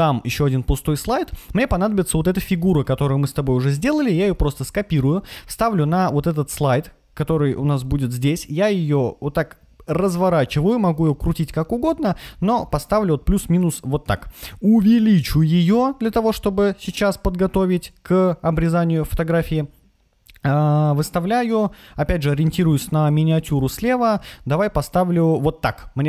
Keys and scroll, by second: 4.0 super+c, 5.6 super+v.